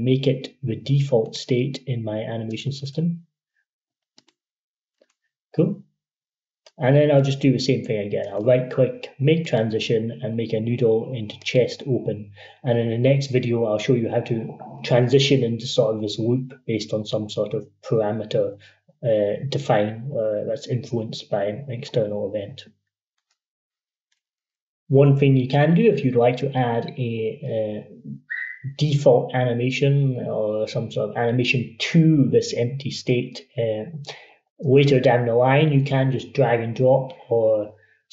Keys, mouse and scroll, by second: 1.1 click, 2.3 right click, 4.0-8.0 drag, 8.0 right click, 9.3 click, 23.4 F13.